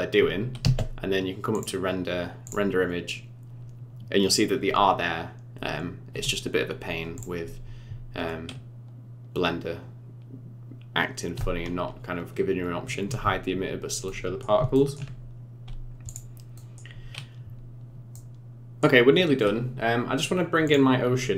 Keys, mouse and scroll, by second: 0.6 space, 1.5 click, 9.8-10.8 scroll down 5, 11.5-14.1 scroll down 6, 14.1 middle click, 15.0 shift+middle click, 16.1 click, 16.5 middle click, 18.1 middle click, 20.7 click.